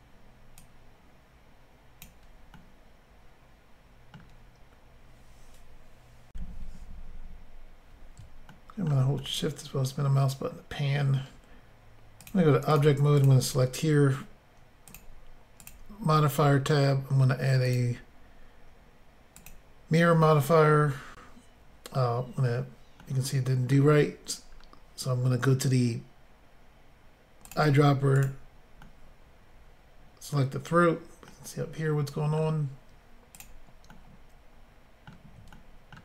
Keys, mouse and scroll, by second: 0.6 click, 2.6 middle click, 6.3 Insert, 8.5 shift+middle click, 9.2 middle click, 12.2 click, 12.3 click, 12.7 click, 12.8 double click, 13.2 double click, 14.9 click, 15.0 click, 15.6 click, 15.7 click, 16.1-16.6 scroll down 6, 17.7 click, 19.0 click, 19.5 click, 20.4-20.9 scroll down 4, 23.0 middle click, 24.4-24.7 scroll down 2, 27.5 click, 27.5 click, 28.2 click, 28.3 click, 28.8 middle click, 31.3 middle click, 33.4 click, 33.4 click, 33.9 middle click, 34.1 scroll up 1, 35.5 shift+middle click.